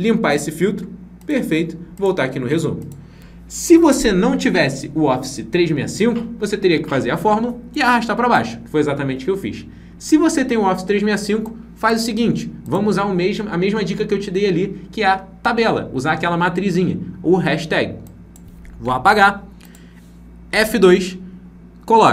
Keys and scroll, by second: 20.4 F2.